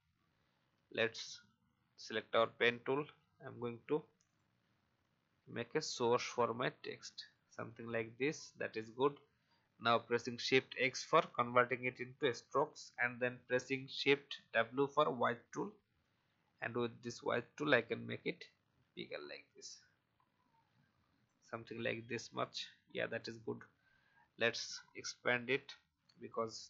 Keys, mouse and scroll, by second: 1.3 click, 2.0 alt+scroll up 1, 4.2-6.3 drag, 8.2 v, 10.2 shift+x, 14.4 shift+w, 16.0-21.5 drag, 21.8 v, 22.3 click, 26.3 alt+scroll up 1.